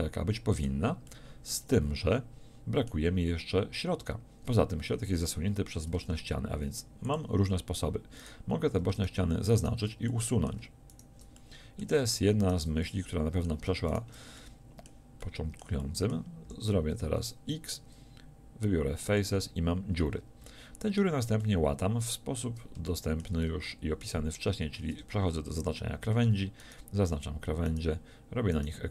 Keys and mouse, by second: 1.1 middle click, 6.0 ctrl+Tab, 11.4-15.8 middle drag, 16.4 x, 19.2-20.5 middle drag, 24.8 ctrl+Tab.